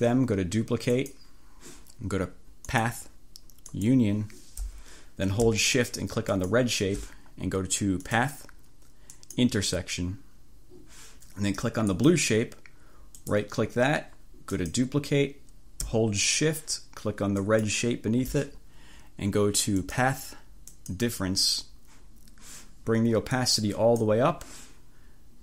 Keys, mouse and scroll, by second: 1.0 click, 2.8 click, 3.8 click, 6.4 click, 8.2 click, 9.2 click, 11.9 click, 13.3 right click, 14.6 click, 17.5 shift+click, 19.8 click, 20.8 click, 23.4 click.